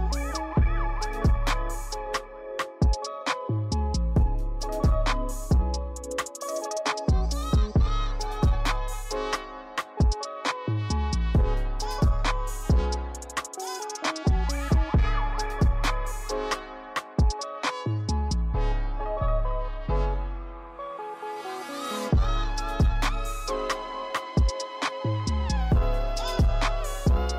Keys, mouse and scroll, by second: 0.8-2.4 drag, 2.9 click, 3.4-4.2 drag, 4.6-6.2 drag, 6.6 click, 6.8-7.1 scroll down 4, 7.1-7.8 shift+middle drag, 7.8 scroll up 3, 7.9 shift+middle drag, 8.3 middle click, 8.5 scroll up 1, 8.6 click, 9.1 right click, 9.8-11.4 drag, 12.1 click, 12.5 click, 13.5 click, 15.0 click, 15.2 click, 15.6 click, 16.8-17.8 drag, 17.8 KP_0, 18.1 scroll down 1, 18.3 click, 18.5-19.0 shift+middle drag, 19.0 click, 19.4-19.9 scroll up 1, 19.9-21.1 shift+middle drag, 21.1 click, 24.7 click, 25.2 click, 25.9 click.